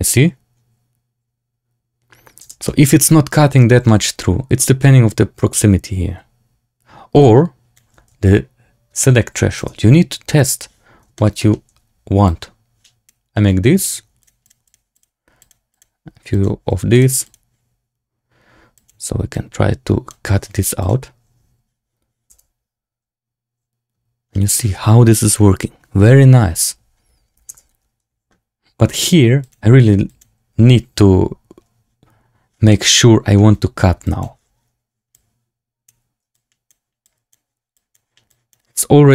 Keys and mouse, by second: 2.4 space, 2.6 middle drag, 3.8 shift+middle drag, 5.2-7.8 shift+drag, 8.2-9.5 shift+drag, 10.5 click, 11.1 shift+click, 11.3 click, 12.2 click, 14.1 click, 14.3 click, 14.6 click, 14.9 click, 15.3 click, 15.6 click, 16.3 click, 16.8 click, 17.2 click, 18.7 click, 19.2 click, 20.7 click, 22.2 space, 27.4 space, 29.4-30.1 drag, 32.6 middle click, 33.9-35.8 drag, 36.2 click, 37.0 click, 37.7 click, 38.2 click, 39.0-39.1 drag.